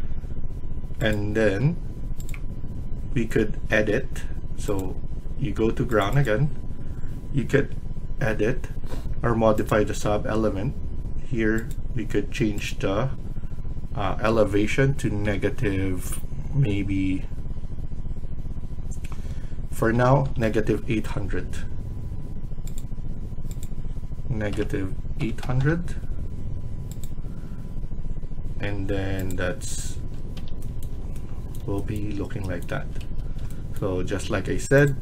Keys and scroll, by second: 1.3 Escape, 3.8 typing, 15.1 -, 19.8-20.8 typing, 24.4-25.6 typing, 29.8 Escape, 32.9 Escape.